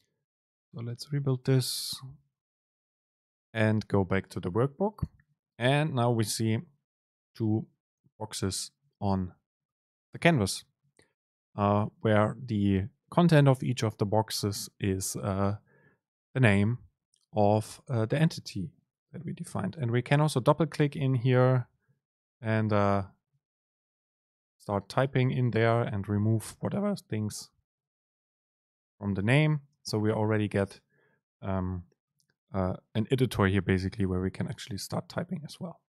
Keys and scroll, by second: 21.0 Right, 21.6 Right, 21.7 BackSpace.